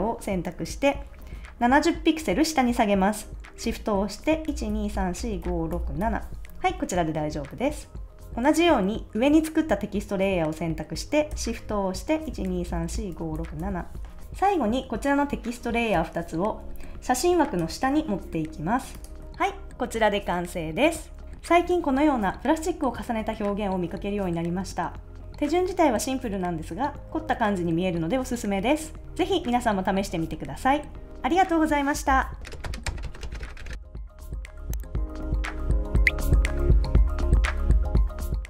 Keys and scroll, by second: 4.5 shift+Down, 12.3 shift+Up, 14.2 super+z.